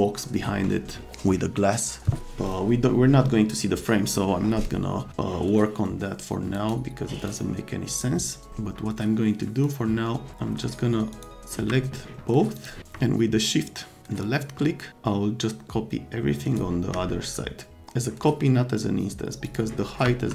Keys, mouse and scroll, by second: 6.5 right click, 7.2 click, 7.9 click, 9.6 click, 11.1 click, 12.6 click, 14.2-16.5 shift+drag, 19.4 click, 20.0 F3.